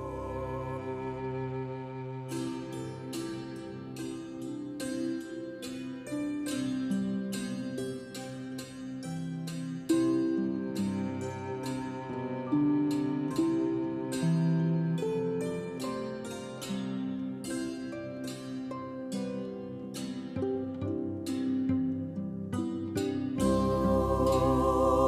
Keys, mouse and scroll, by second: 7.7-17.5 drag, 17.5 middle click, 17.6-25.0 drag.